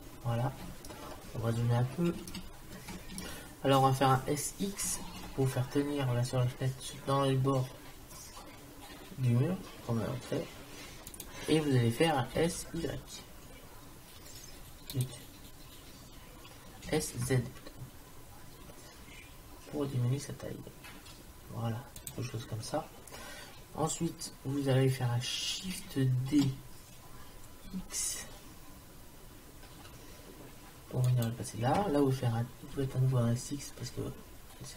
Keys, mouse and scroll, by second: 4.9 s, 12.4 s, 16.9 s, 23.9 middle click, 26.3 shift+d, 32.8 s.